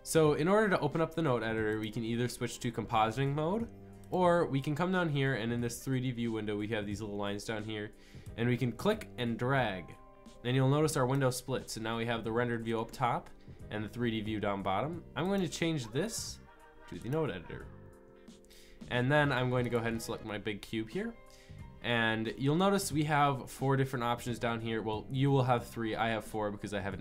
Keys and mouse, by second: 1.7-3.0 drag, 3.3 click, 8.2-9.7 drag.